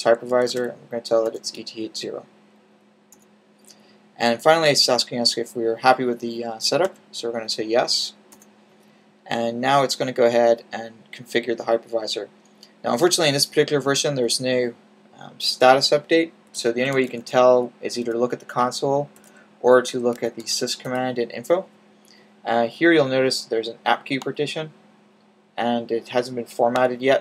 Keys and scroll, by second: 0.1-1.2 typing, 6.5-7.2 typing, 16.4-17.9 typing, 19.8-20.5 typing.